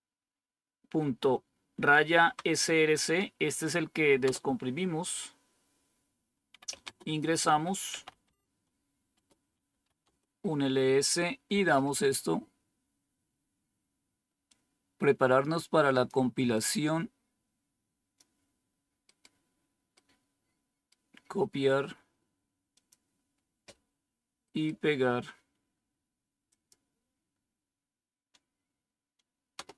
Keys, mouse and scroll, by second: 1.4-2.2 typing, 4.2 Return, 4.2 typing, 6.2-10.5 typing, 9.0 Return, 14.4-16.0 drag, 16.5-18.1 drag, 19.0-22.6 right drag, 22.6 click, 26.4 click, 29.5 Return.